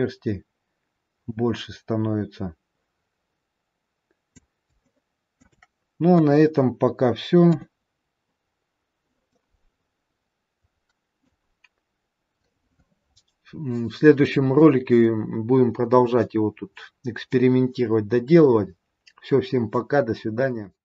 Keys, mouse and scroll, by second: 4.8 shift+middle click, 6.1 KP_1, 7.5 KP_3, 9.1-9.9 scroll up 3, 9.9 middle click, 11.8-12.2 scroll down 3.